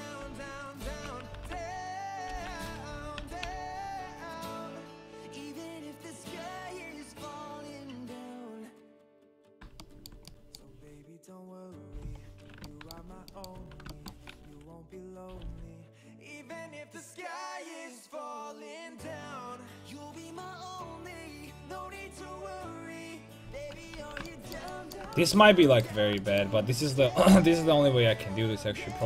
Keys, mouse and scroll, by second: 0.0 alt+j, 0.8 ctrl+t, 1.5 alt+h, 2.3 alt+j, 2.9 a, 3.2 a, 3.4 a, 4.6 k, 9.8-12.3 middle drag, 12.7 middle click, 13.6 a, 15.4 k, 23.5 middle click, 23.9 a, 24.3 middle click, 27.3 k.